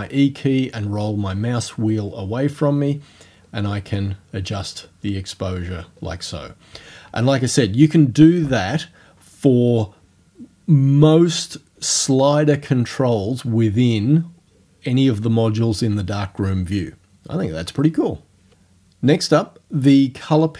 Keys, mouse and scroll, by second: 0.1-3.0 scroll up 6, 3.5-5.3 scroll up 5, 5.6-6.1 scroll down 1.